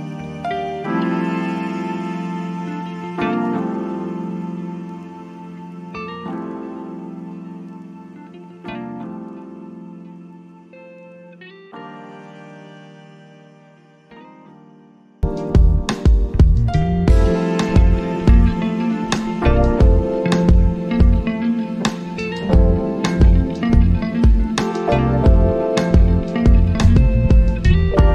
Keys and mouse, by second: 7.9-10.9 drag, 11.1-15.0 drag, 17.4 click, 21.5 click, 26.5 click.